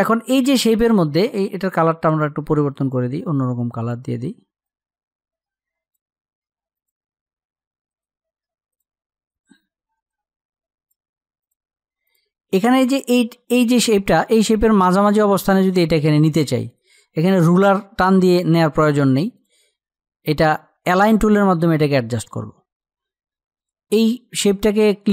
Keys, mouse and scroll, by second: 8.9 click.